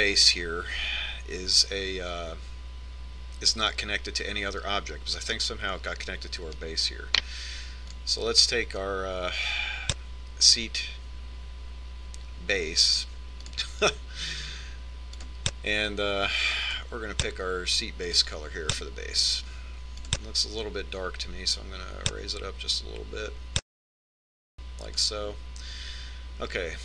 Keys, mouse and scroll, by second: 7.0-9.9 right drag, 9.8-11.6 drag, 17.1-18.9 drag, 22.0-23.7 drag.